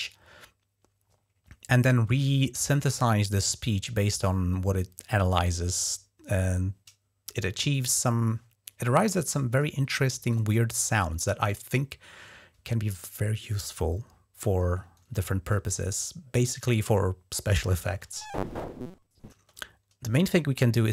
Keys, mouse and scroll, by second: 16.5 click, 17.7 space, 19.1 space.